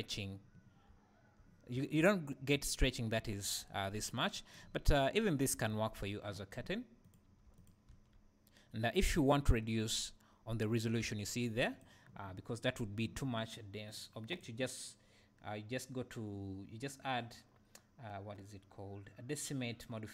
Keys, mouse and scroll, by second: 4.7 scroll down 1, 5.0 `, 7.0 click, 7.4 Tab, 7.5 click, 11.3 Tab, 11.7 click, 13.9-20.1 drag.